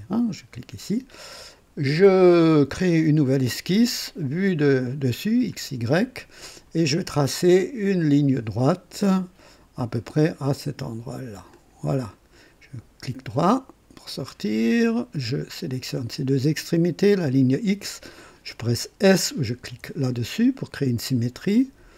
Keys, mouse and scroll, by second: 2.7 click, 5.5 click, 8.0 click, 9.9 click, 11.5 click, 12.1 right click, 14.1 click, 15.9 click, 17.2 click, 19.7 s.